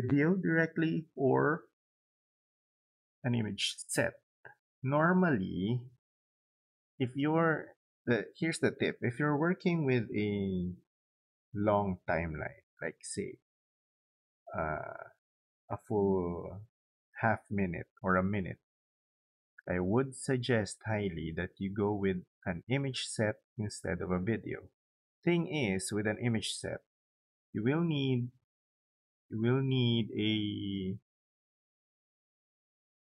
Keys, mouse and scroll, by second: 28.9 click.